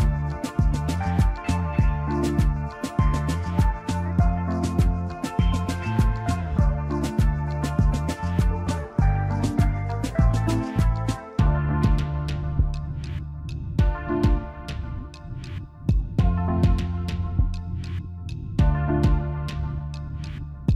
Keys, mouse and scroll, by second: 3.4 space, 4.0 ctrl+alt+click, 4.1-9.5 ctrl+alt+drag, 10.8 click, 14.7-18.2 drag, 18.9 scroll down 1, 20.5-20.7 scroll up 1.